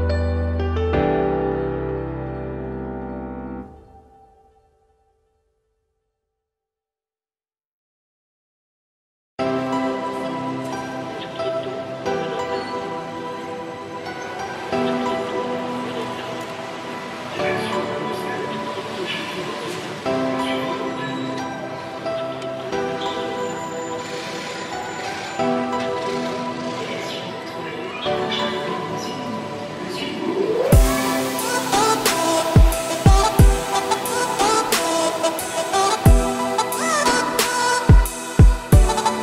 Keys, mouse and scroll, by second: 0.1 click, 0.7 `, 1.2 shift+middle drag, 1.4-2.2 scroll up 5, 2.2 Tab, 2.6 scroll down 3, 2.7 middle click, 3.4 Tab, 4.1 click, 4.6 Tab, 5.2-6.5 middle drag, 6.5 Tab, 6.7 `, 7.1-7.7 scroll up 2, 7.7 Tab, 8.0 click, 8.3 Tab, 8.5 click, 8.7 Tab, 9.2 `, 10.8 `, 12.2 click, 12.7 shift+s, 13.1 Tab, 13.4 shift+a, 14.7 scroll down 1, 15.0 shift+middle drag, 15.2 scroll up 3, 15.5 Tab, 15.9-16.4 scroll down 4, 16.4 r, 18.6 Tab, 18.9-19.5 scroll up 2, 19.5 g, 21.3 Tab, 21.4-21.8 scroll up 1, 21.8 s, 23.3 Tab, 23.6 g, 24.8 Tab, 25.0 scroll up 2, 25.2 shift+middle click, 25.6-26.7 scroll up 1, 26.7 e, 30.2 a, 31.2 click, 31.6 alt+click, 32.1 s, 33.4 a, 33.7 `, 34.1 scroll down 3, 34.3 middle click, 34.8-35.1 scroll up 4, 35.5 e, 37.0 `, 37.5 z, 38.4 g.